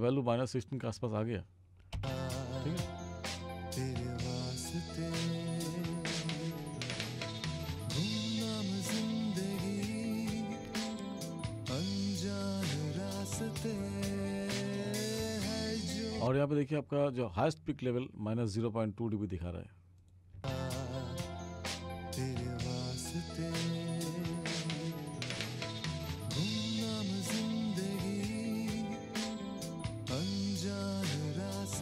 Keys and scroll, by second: 2.0 space, 16.3 space, 20.5 space.